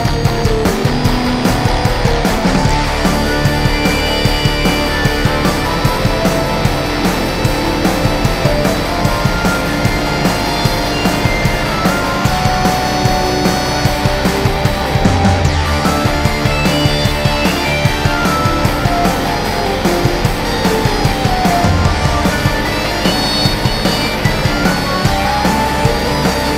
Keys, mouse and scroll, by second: 0.7-3.2 drag, 7.4 click, 10.7-15.7 drag, 17.2-18.4 scroll down 1, 18.4 click, 20.2-23.0 drag, 23.6 click.